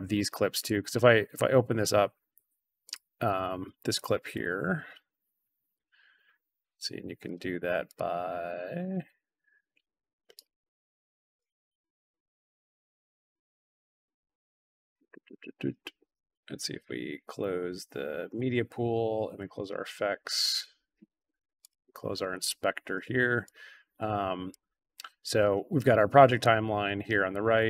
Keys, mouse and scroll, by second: 0.5 click, 0.7 click, 2.8 click, 3.1 click, 3.3 click, 3.8 click, 5.7-7.2 drag, 7.8 click, 8.4 click, 10.3-11.3 right drag, 11.3 click, 11.6 click, 12.1 click, 12.9 click, 13.1 click, 13.7 right click, 15.1 click, 16.2 click, 18.3 click, 19.3 click, 21.5 click, 23.4-24.4 drag, 26.8-27.6 drag.